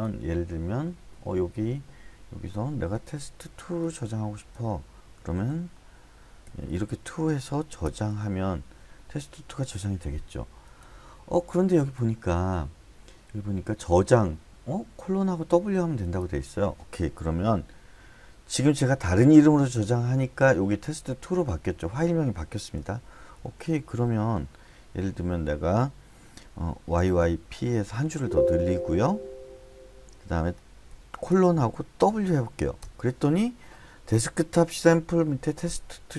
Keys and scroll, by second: 5.5-6.9 typing, 7.8 Return, 23.4 shift+;, 24.3 Escape, 24.9 j, 26.7-27.9 typing, 28.1 Escape, 30.9 :, 32.0 w, 32.8 Return.